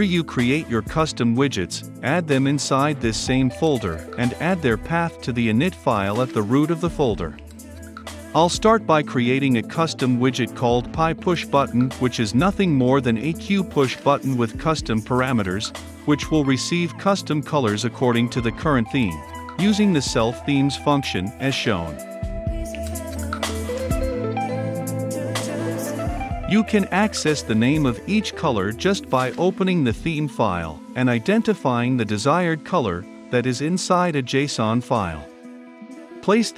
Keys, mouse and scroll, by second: 2.3-5.0 drag, 5.0 Return, 5.4-9.3 typing, 9.0 Return, 9.5 Return, 12.9 click, 13.3-17.0 typing, 13.6 Return, 13.8 Left, 14.0 Right, 15.6 Right, 16.0 Return, 16.7 Return, 16.9 Left, 17.0 Right, 18.0 Return, 18.5-20.7 typing, 18.7 Return, 19.2 Return, 19.3 Left, 19.4 Right, 20.9 Return, 21.5 Return, 22.1-23.1 typing, 22.3 Return, 23.9-28.4 drag, 28.4 right click, 29.3-30.6 drag, 31.1 ctrl+v, 31.4 click, 32.1 ], 32.5 shift+~, 36.1 click.